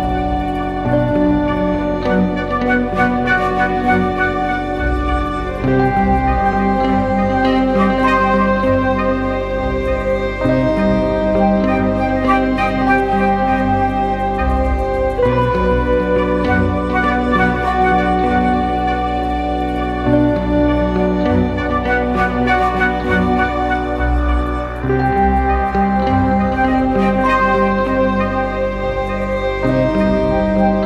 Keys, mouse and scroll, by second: 0.1 double click, 2.6 e.